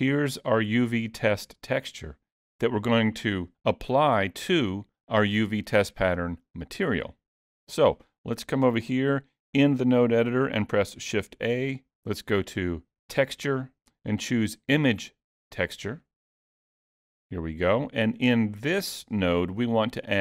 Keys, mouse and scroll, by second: 0.0-1.7 scroll up 1, 7.9 middle click, 11.4 shift+a.